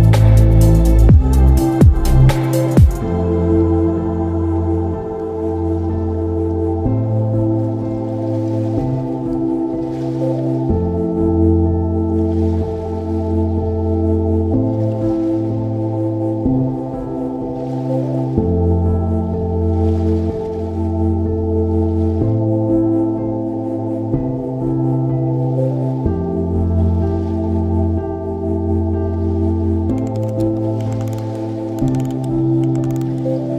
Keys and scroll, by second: 19.3 ctrl+e.